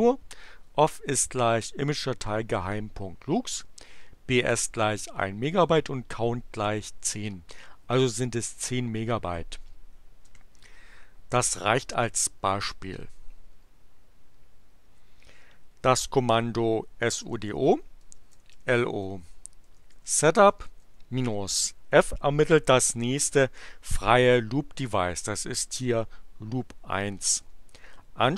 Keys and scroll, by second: 10.2 Return, 16.8-21.2 typing, 24.0 Return.